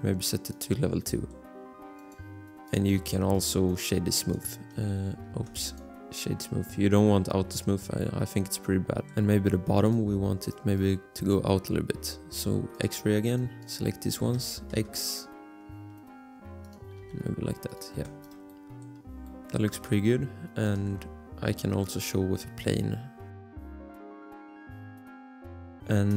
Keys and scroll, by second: 2.0 Return, 5.5 ctrl+z, 9.0 Tab, 14.3-15.2 typing, 17.0 r, 17.9 Tab, 20.9 shift+a, 23.4-25.0 typing.